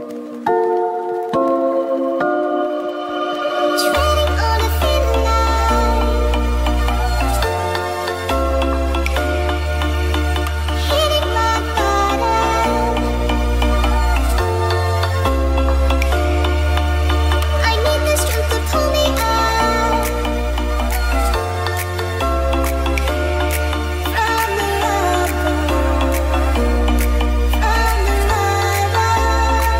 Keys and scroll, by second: 1.2 [, 1.7 space, 3.9 space, 4.2 ctrl+s, 5.7 space, 7.1 space, 8.4 ctrl+z, 11.3 [, 12.9 space, 14.7 space, 16.0-19.6 typing, 21.8 b, 22.3 s, 22.9 ], 24.6 ctrl+s, 24.9 [, 25.5 [, 26.4 space.